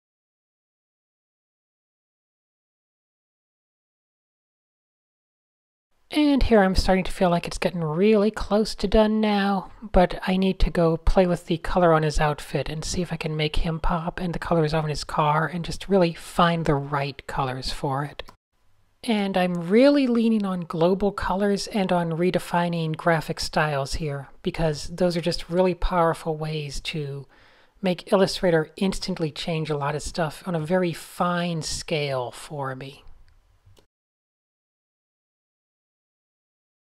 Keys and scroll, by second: 0.0 shift+super+Tab, 1.3 Tab, 7.7 x, 14.9 super+space, 14.9 super+space, 15.1 super+space, 15.5 super+0, 16.9 super+z, 17.3 super+z, 17.5 super+z, 18.2 super+z, 18.7 super+z, 18.9 super+z, 19.2 super+z, 19.4 super+z, 20.0 super+z, 27.8 super+z, 32.5 super+z, 33.0 super+space, 33.2 super+space, 33.2 typing, 33.6 super+0, 33.9 Tab, 36.5 Tab.